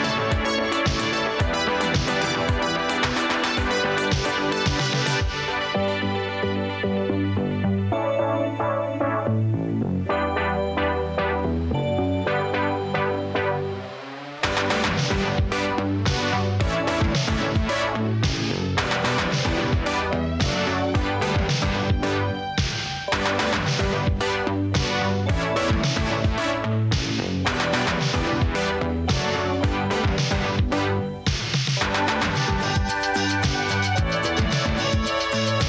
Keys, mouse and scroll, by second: 0.2 space, 0.6 s, 2.7 space, 3.9 space, 4.7 s, 5.2 space, 7.5 s, 8.3 s, 10.3 s, 12.6 space, 13.0 s, 14.6 space, 15.6 space, 17.2 space, 21.3 s, 23.9 space, 26.3 space, 27.6 space, 28.7 s, 30.9 space, 32.9 space, 35.0 space.